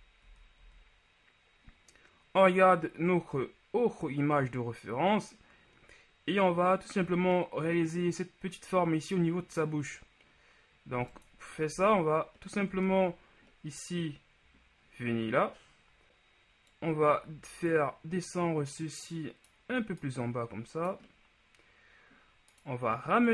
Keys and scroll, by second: 0.1 z, 0.3 z, 0.7 z, 12.0 z, 12.8 Tab.